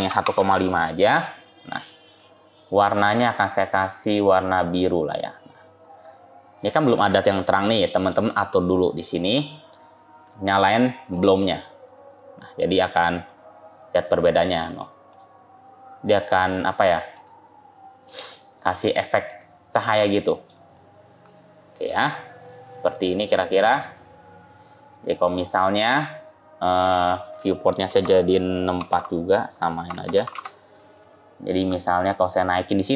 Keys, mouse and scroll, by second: 1.6 click, 2.7 click, 6.4 click, 7.5 shift+middle click, 9.2 click, 11.0 click, 14.0 click, 14.4 click, 15.0 scroll up 1, 15.1 middle click, 17.0 click, 17.9 click, 19.2 click, 19.8 middle click, 20.6-21.2 scroll down 2, 21.2 click, 21.8 click, 22.8 middle click, 27.1 click, 29.8 BackSpace.